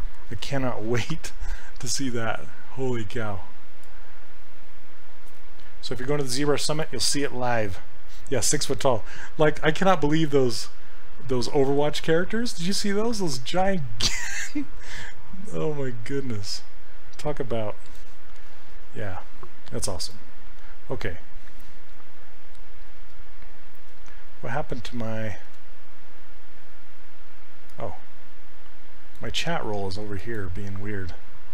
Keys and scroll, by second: 23.0 alt+Tab, 25.4 alt+Tab.